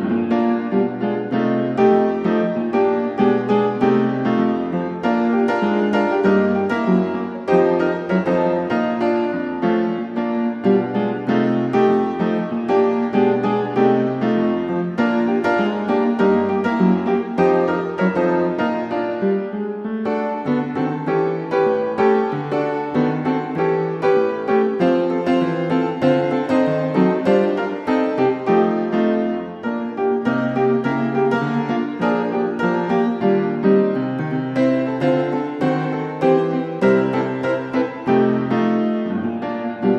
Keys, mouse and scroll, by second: 1.4 click, 1.8 Escape, 3.1 click, 4.4 click, 5.2 click, 6.3 typing, 6.9 Return, 8.2-8.8 scroll, 10.0 click, 10.6-11.7 drag, 12.0-13.5 typing, 14.3 Return, 16.5 click, 17.0 click, 18.2-19.1 typing, 19.8 Return, 24.8 click, 29.0 click, 30.7 click, 32.7 click, 35.2 middle click, 36.2 click, 36.9 right click, 38.0 click, 39.3 n.